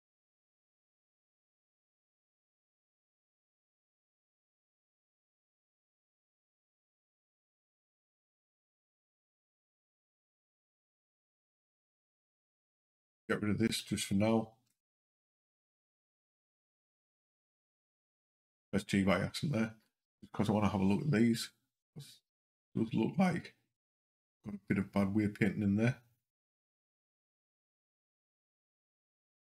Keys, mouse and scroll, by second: 3.6 click, 9.3 l, 10.2 h, 12.1 click, 13.6 l, 14.5 g, 16.6 h, 26.8 click, 27.4 click, 28.8 v.